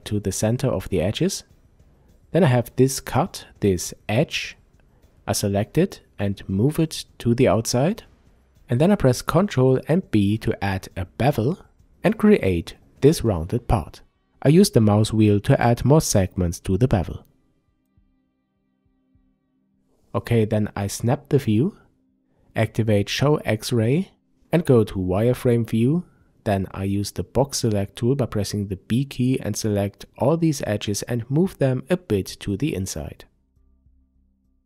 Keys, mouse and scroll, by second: 1.0 click, 2.6 click, 3.7 click, 4.2-4.5 scroll down 1, 4.5-5.9 middle drag, 5.9-13.6 drag, 8.4 ctrl+b, 14.0-21.0 middle drag, 14.8-15.2 scroll down 2, 19.2 a, 21.0 click, 22.1 a, 23.7 click, 24.8 b, 27.7-33.7 drag, 34.2 click.